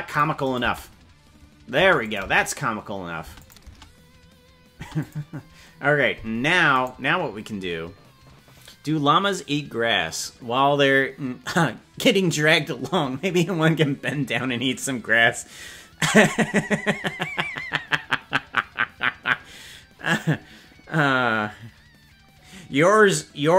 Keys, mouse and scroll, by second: 0.4 click, 0.6 space, 1.8 space, 2.0-3.6 drag, 2.2 space, 3.2 space, 4.8 space, 5.0 click, 6.8 right click.